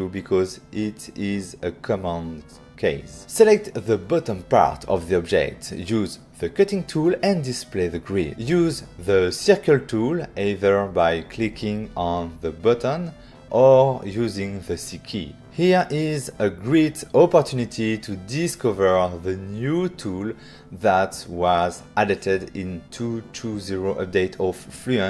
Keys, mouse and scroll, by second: 1.1 ctrl+middle click, 2.0 middle click, 2.4 middle click, 3.4 ctrl+middle click, 4.4 middle click, 5.1 click, 5.9 f, 6.6 click, 7.2 right click, 9.0 click, 10.1 click, 10.6 click, 11.1 click, 14.8 click, 15.4 click, 15.4 click.